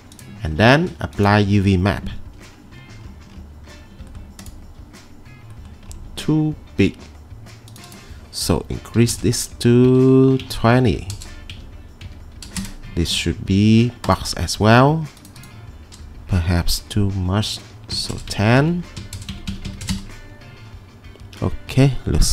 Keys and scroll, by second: 8.7-9.7 typing, 9.9 Tab, 10.5 Tab, 10.9 typing, 11.6 Tab, 12.1 Tab, 12.4 typing, 12.6 Return, 17.7-20.0 typing, 18.6 Tab, 19.4 Tab, 19.6 Tab, 20.0 Return.